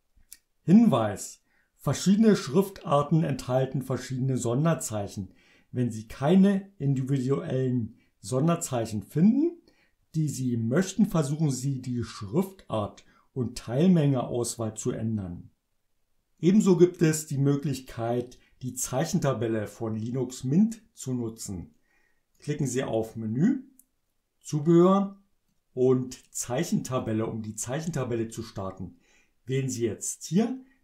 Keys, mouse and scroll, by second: 22.3 click, 25.5 click, 27.0 click.